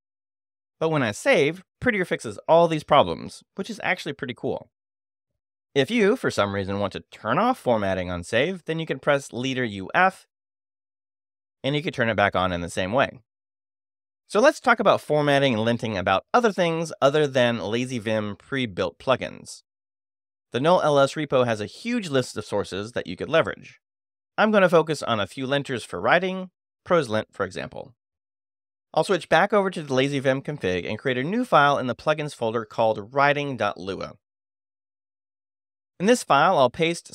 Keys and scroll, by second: 0.5 Escape, 1.1 shift+;, 1.2 shift+w, 1.8 w, 2.1 Return, 7.5 space, 8.2 u, 9.9 f, 24.1 super+f, 25.4 p, 25.8 e, 31.3-33.7 typing, 32.1 Return, 33.9 Return, 35.0 Return, 36.5 space, 36.6 e.